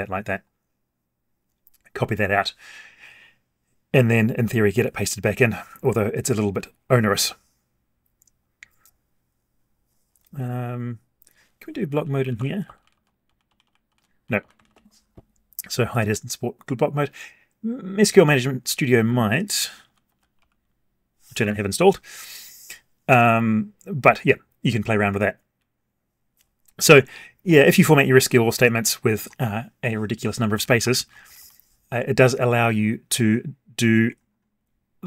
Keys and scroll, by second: 13.2 alt+shift+Down.